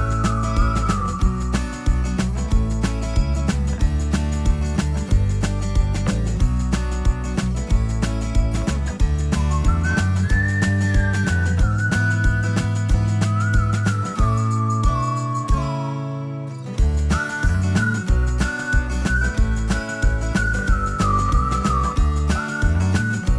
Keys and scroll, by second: 3.6 Escape, 14.2 space, 14.6 Escape.